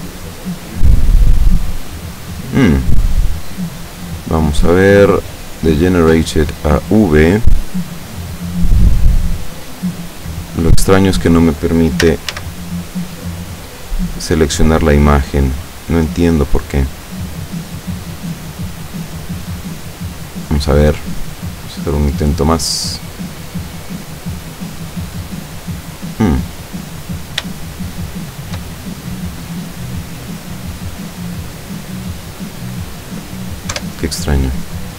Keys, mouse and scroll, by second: 0.7-1.8 scroll down 1, 2.0-2.9 scroll down 1, 2.9-4.0 scroll down 1, 4.0 click, 5.0 click, 5.8 click, 7.1-7.8 scroll up 2, 8.2-10.4 scroll up 2, 10.4 right click, 12.1 a, 14.9 click, 16.2 click, 18.8 click, 20.2 click, 21.7 click, 23.1 click, 24.7 click, 27.7-28.7 shift+middle drag, 28.7 shift+scroll up 1, 29.5 scroll down 1, 33.8 F12.